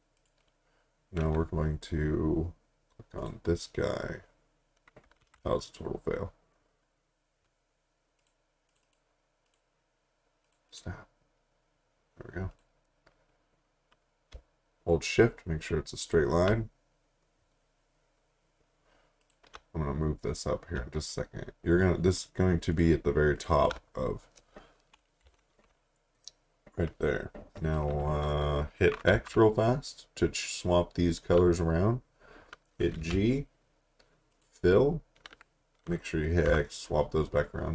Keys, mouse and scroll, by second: 3.2 click, 5.2 ctrl+z, 8.2 click, 16.0 click, 19.2 click, 22.7 shift+click, 23.3 shift+click, 25.2 Up, 29.1 x, 32.9 g, 34.3 click, 36.5 x.